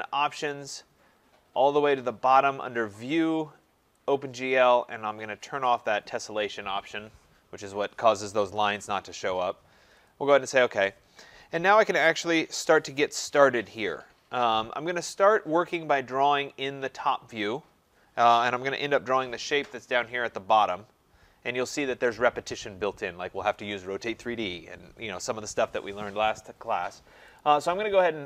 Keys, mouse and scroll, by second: 3.3 click, 4.1 click, 5.8 click, 10.1 click, 12.5-15.2 drag, 27.4-28.2 drag.